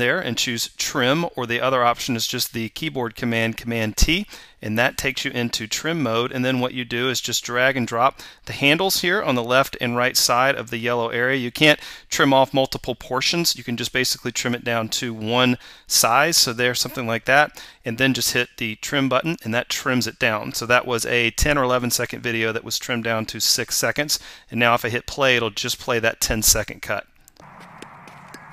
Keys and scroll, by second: 4.0 super+t.